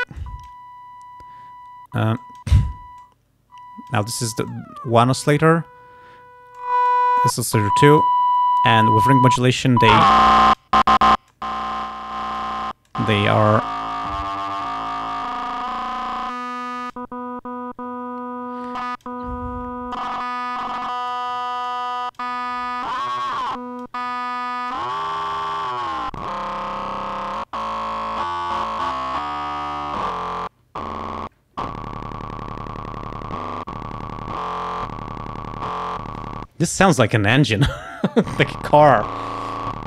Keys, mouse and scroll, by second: 0.2 click, 2.3 click, 3.0-4.1 drag, 4.6 click, 6.6 click, 7.7 click, 8.9 click, 10.0 click, 11.4-12.6 drag, 12.9 click, 16.8 click, 18.9 click, 20.0-21.4 drag, 21.7 click, 22.9-24.1 drag, 24.8-26.5 drag, 27.4 click.